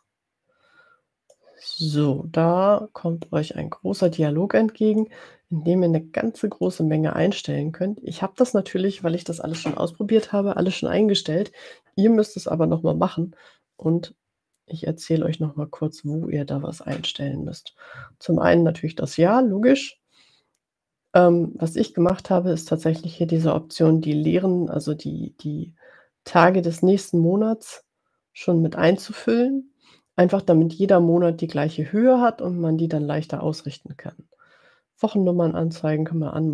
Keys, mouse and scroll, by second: 0.0 click, 1.6-3.8 drag, 4.0 click, 5.0-7.0 drag.